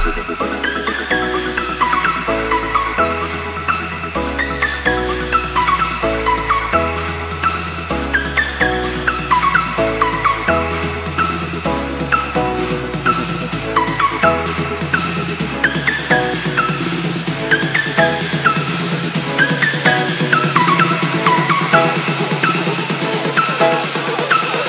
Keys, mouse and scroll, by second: 1.7 ctrl+c, 1.9 alt+Tab, 3.0 click, 3.1 Return, 3.6 click, 3.7 Return, 4.4 click, 5.6-6.0 alt+scroll down 1, 6.3 ctrl+s, 8.1 click, 13.8 shift+s, 15.0 click, 20.2 ctrl+z, 20.8 ctrl+s, 22.4 click.